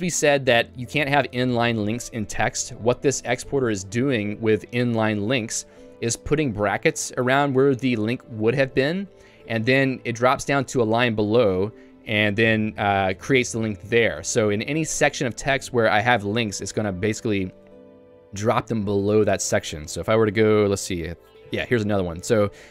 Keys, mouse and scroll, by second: 5.6 l, 5.9 h, 6.6-7.7 l, 8.9 h, 9.1 h, 11.6 h, 11.8 h, 19.5 ctrl+d, 19.8 ctrl+d, 21.8 k.